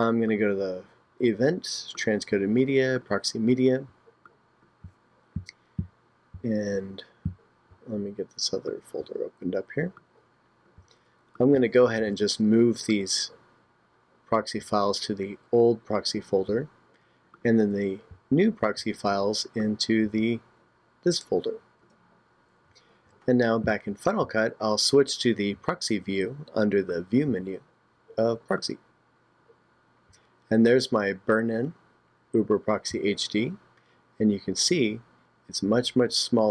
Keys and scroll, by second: 12.0 super+a, 18.8 super+a.